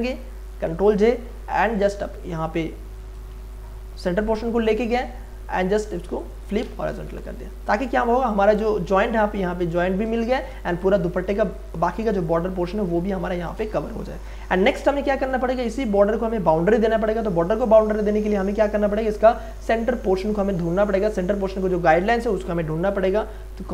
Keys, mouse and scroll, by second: 0.5 ctrl+j, 0.9 ctrl+t, 1.6 alt+click, 2.0 click, 3.3 space, 3.5 ctrl+click, 4.3 click, 4.9 right click, 6.2 click, 7.2 Return, 8.0 space, 8.3-10.2 ctrl+drag, 10.2 v, 10.6 space, 10.8-13.4 ctrl+drag, 13.4 shift+click, 14.2 ctrl+e, 23.6 ctrl+a.